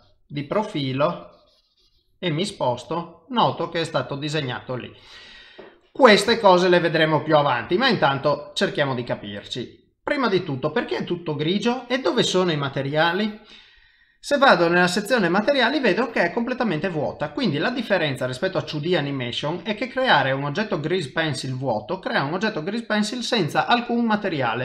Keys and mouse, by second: 0.3 click, 1.2 click, 2.5 middle click, 6.3 middle click, 6.3 shift+middle click, 6.9 middle click, 13.6 middle click, 14.7 click, 16.8 middle click, 20.2 middle click, 21.8 middle click.